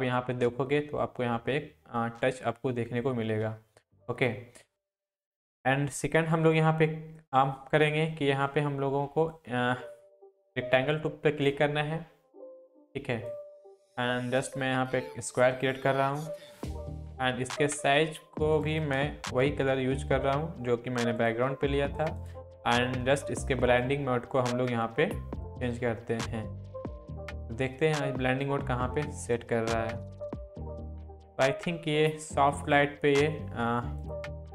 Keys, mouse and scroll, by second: 2.5-3.3 alt+scroll down 2, 3.3-4.5 alt+scroll down 1, 4.5 scroll down 1, 4.7-7.4 drag, 9.3 click, 9.3-11.5 drag, 14.8 click, 18.7 click, 19.5 ctrl+v, 21.2 click, 34.0 click.